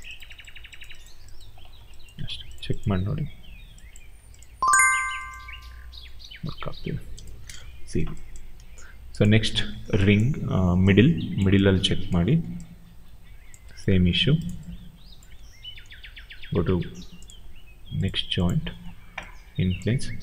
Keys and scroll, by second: 2.1 w, 4.6 e, 6.1 ctrl+a, 7.3 0, 7.3 Return.